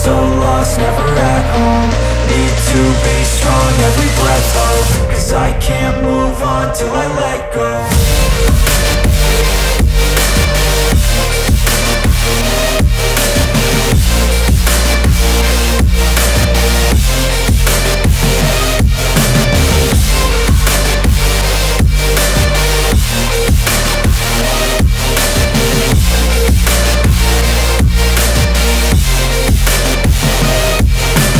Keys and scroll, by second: 4.5 ctrl+shift+], 19.2 ctrl+s, 23.2 BackSpace.